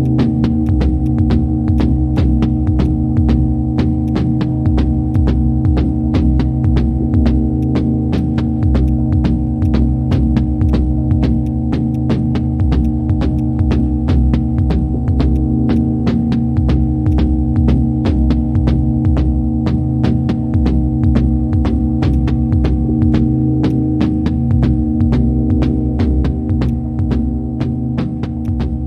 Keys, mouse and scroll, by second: 15.3 ctrl+shift+click, 17.1 ctrl+shift+click, 23.7 ctrl+shift+click, 24.0 ctrl+shift+click, 28.0 ctrl+z, 28.4 ctrl+shift+click.